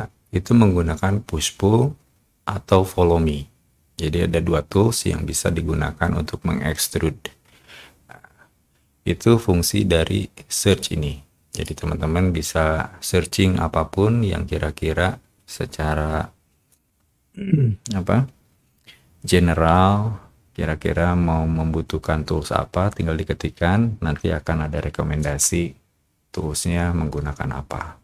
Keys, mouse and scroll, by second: 10.6 click, 11.4 click.